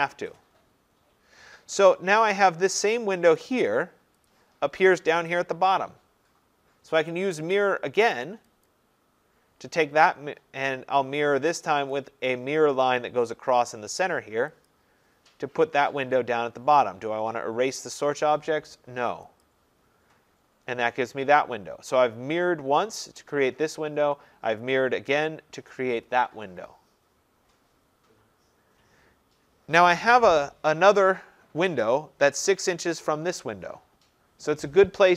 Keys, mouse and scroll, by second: 3.5 click, 4.3 click, 8.7 click, 12.0 click, 14.7 click, 15.5-17.0 scroll, 19.5 click, 19.8 scroll up 5, 20.3 scroll down 1, 20.3-20.8 scroll, 28.0-33.3 scroll.